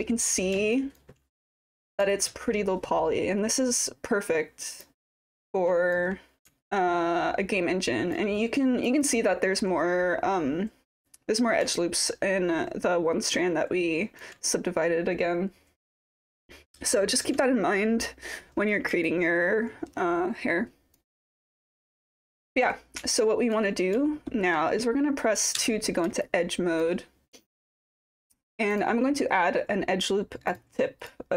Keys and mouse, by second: 0.7 alt+click, 2.1-4.8 alt+drag, 5.2-5.9 alt+drag, 6.6-8.1 alt+drag, 8.4 alt+middle drag, 8.9 alt+click, 11.7-14.2 alt+drag, 16.2-17.2 alt+drag, 19.0-20.9 alt+drag, 21.6 click, 22.0-22.4 alt+drag, 23.1-23.5 alt+drag, 24.1 alt+middle drag, 25.6 2, 26.2 alt+click, 30.5 click, 31.0 click.